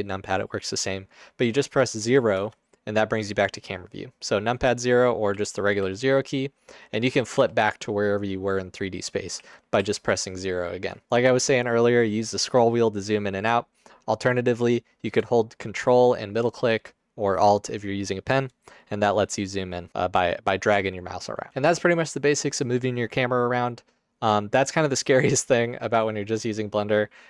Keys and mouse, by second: 2.4 KP_0, 5.3 KP_0, 5.9 KP_0, 6.8 KP_0, 7.4 KP_0, 9.4 KP_0, 9.8 KP_0.